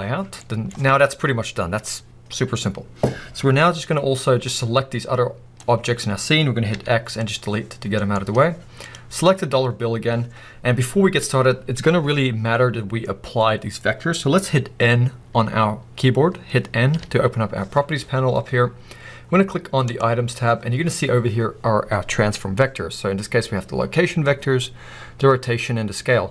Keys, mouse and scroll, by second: 0.4-3.7 middle drag, 3.7-5.6 scroll down 2, 5.6 click, 5.8 scroll up 1, 7.4 x, 8.0-9.0 middle drag, 8.2-9.0 scroll up 2, 9.0 click, 9.1 scroll up 1, 9.8-26.3 middle drag, 9.8-10.9 scroll up 2, 10.9-12.0 scroll up 1, 16.9 n, 18.0 n.